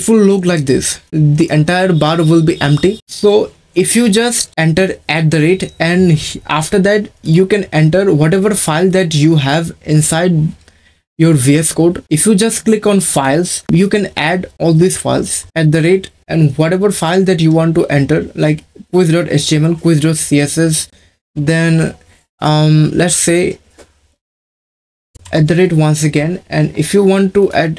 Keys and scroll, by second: 15.5 shift+2, 25.2 shift+2.